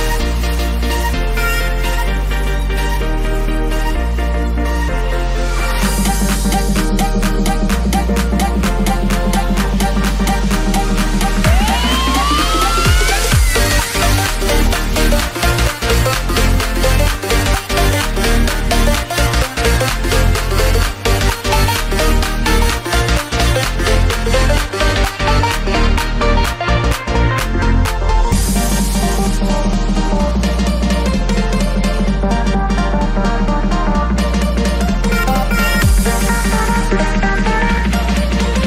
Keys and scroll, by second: 10.5 Right, 11.1 Left, 13.6 ctrl+z, 15.5 Down, 15.7 Left, 17.5 Right, 17.9 Down, 18.3 Right, 19.6 Right, 19.9 Down, 22.4 Right, 24.3 Down, 25.7 Right, 37.2 [.